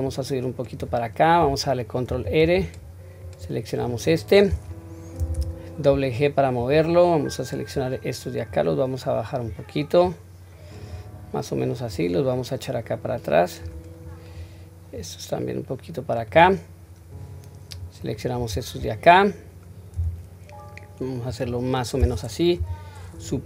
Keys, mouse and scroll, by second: 0.0 click, 2.1 ctrl+r, 7.3 click, 8.5 click, 10.1 click, 11.9-13.6 drag, 14.0 click, 14.9-16.3 drag, 17.1 click, 20.0 s, 22.6 KP_7.